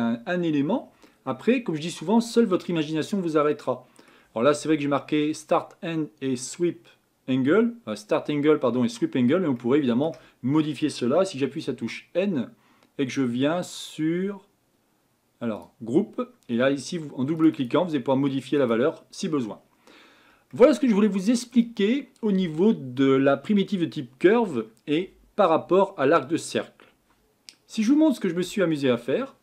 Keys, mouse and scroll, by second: 11.9 n, 18.6 click.